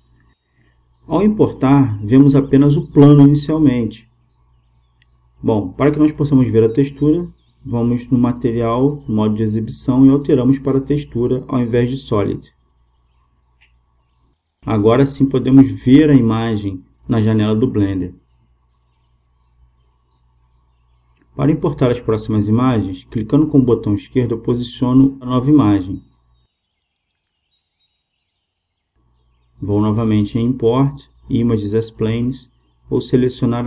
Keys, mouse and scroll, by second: 0.0-2.2 drag, 9.0-11.3 drag, 17.2-19.5 drag, 20.6-29.3 drag, 29.8-31.6 drag.